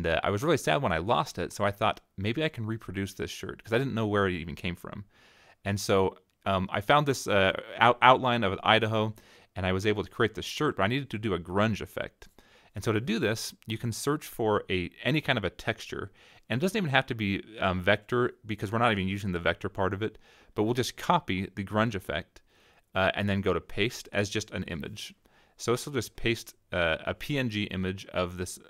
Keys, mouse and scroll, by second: 2.1-3.6 drag, 4.6-6.1 drag, 6.6 -, 7.1 click, 7.2 middle click, 7.3 click, 7.4 middle click, 7.8-8.8 drag, 9.2-11.0 drag, 11.1 middle click, 11.2 click, 11.7 click, 13.4 right click, 14.9 click, 16.0 click, 16.8 right click, 18.2 click, 19.4-21.8 drag, 22.3-23.3 drag, 23.9-25.5 drag, 25.7 click, 27.8 click, 28.3-28.6 scroll down 6.